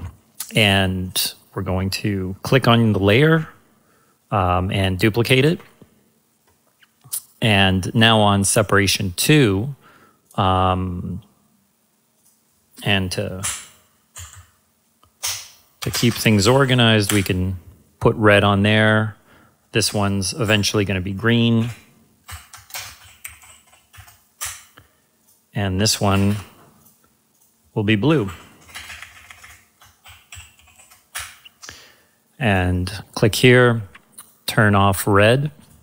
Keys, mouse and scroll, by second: 1.0 ctrl+Num_Lock, 1.0-3.1 ctrl+drag, 5.2 ctrl+c, 5.4 ctrl+v, 10.2-12.2 drag, 13.4 Return, 14.1 Right, 15.2-17.1 typing, 15.8 Left, 18.7 click, 19.8 Return, 20.4 Right, 22.2-23.9 typing, 24.4 Return, 25.2 click, 26.1 ctrl+c, 26.3 ctrl+v, 26.8 click, 28.0 Return, 28.2 Right, 29.8-31.2 typing, 32.5 click.